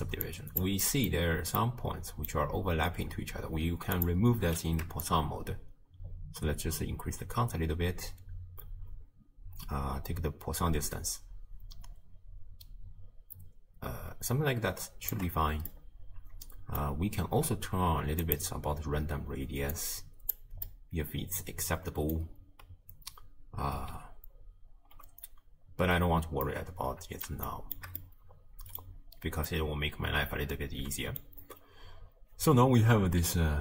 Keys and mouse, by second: 0.3 click, 0.9 middle click, 1.7 middle click, 5.0-15.1 shift+drag, 15.8-16.9 drag, 18.3 click, 19.8 click, 20.7-22.2 drag, 26.5-27.4 drag, 27.5-27.8 shift+drag, 28.1 click, 29.5-31.3 drag.